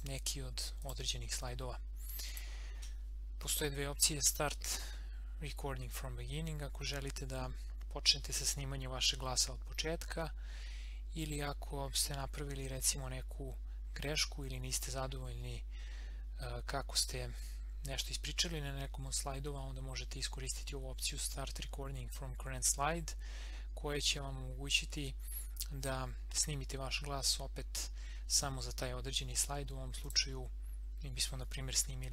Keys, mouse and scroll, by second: 30.0 click.